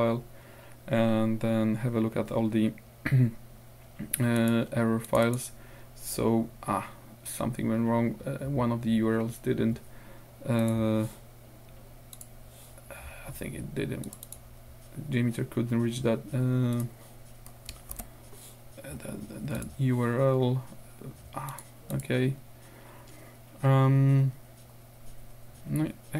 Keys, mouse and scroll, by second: 4.4 click, 5.1-5.6 scroll up 2, 10.6-10.9 scroll up 2, 12.2-12.5 scroll up 1, 14.1-14.6 scroll up 1, 16.8 scroll up 1, 18.0 ctrl+w, 19.6 click, 21.5 click, 21.9 click.